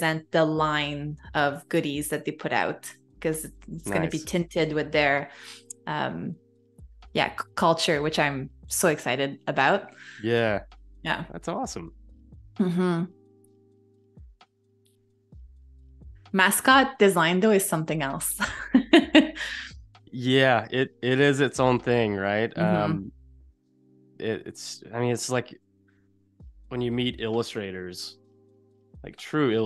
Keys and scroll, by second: 0.3 super+z, 0.8 super+z, 6.3 a, 7.4 space, 12.9 i, 13.3 a, 15.3 space, 19.9 z, 20.6 a, 25.5 super+u.